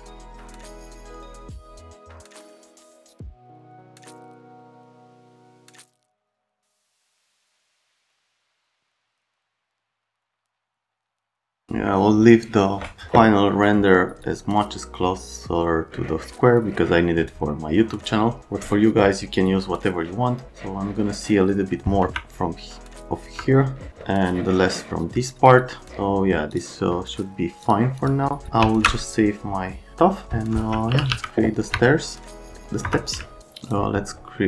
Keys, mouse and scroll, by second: 0.1 click, 1.2 click, 1.4 click, 2.4 click, 2.6 click, 3.1 click, 3.8 right click, 4.4 click, 5.1 shift+d, 5.2 shift+d, 6.9 click, 7.3 F10, 7.8 click, 8.1 click, 8.9 middle click, 9.8 right click, 10.0 middle click, 10.2 right click, 10.2 middle click, 10.8 click, 10.9 click, 22.0 F3, 23.3 F3, 26.6 click, 27.6 click, 28.0 click, 28.6 ctrl+s, 30.6-31.6 typing, 31.7 F3, 32.8 F3.